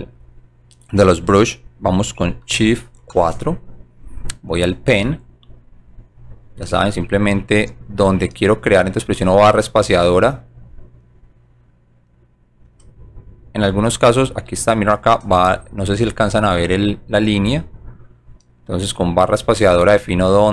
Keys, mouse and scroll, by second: 5.6 click, 9.1 space, 10.6 click, 12.7 space, 15.2 space, 16.7 right click, 19.5 space.